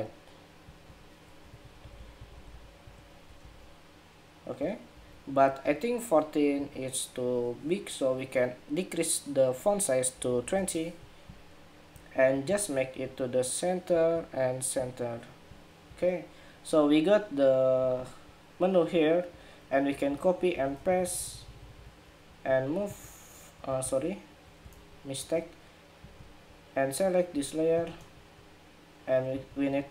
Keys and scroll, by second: 3.1 super+-, 4.7 super+=, 19.8 super+c, 20.3 super+v, 22.8 alt+shift+Right, 23.6 alt+shift+Left, 24.4 super+z, 25.0 super+z, 29.2 alt+Right.